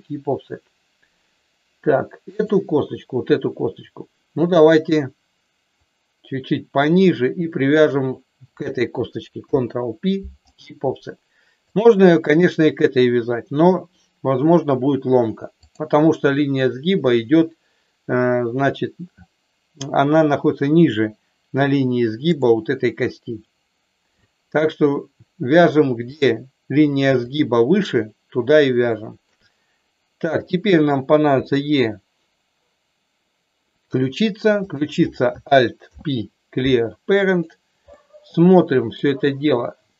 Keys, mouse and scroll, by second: 2.2 click, 5.8-6.9 drag, 7.7 shift+click, 9.3 ctrl+p, 11.7 click, 15.7 click, 22.3 click, 24.2 shift+middle click, 27.2 click, 28.9 shift+middle click, 30.3 click, 31.3 e, 33.8 click, 34.6 click, 35.8 alt+p, 37.9-39.1 middle drag.